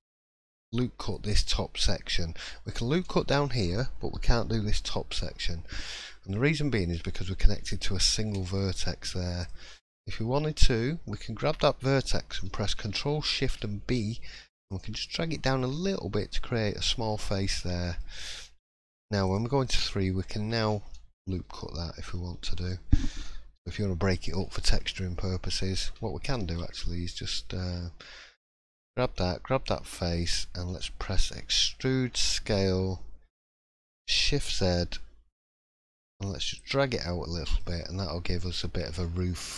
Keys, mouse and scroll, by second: 5.1 middle click, 6.0 shift+middle click, 6.4-7.5 scroll up 1, 8.0 1, 8.2 middle click, 9.4 click, 9.8 shift+middle click, 13.3 ctrl+shift+b, 15.0 middle click, 15.6 scroll up 1, 15.8 shift+middle click, 17.0-18.1 scroll down 3, 17.4 middle click, 18.6 3, 19.2 click, 20.5 ctrl+r, 23.2 middle click, 24.4 shift+middle click, 25.0-25.9 scroll up 1, 26.2 alt+click, 26.7 middle click, 27.4 scroll up 1, 28.6 shift+click, 28.9 shift+middle click, 30.1 scroll down 1, 31.4 e, 36.9 middle click, 37.8 shift+middle click, 38.4-39.0 scroll up 5, 39.0 shift+middle click.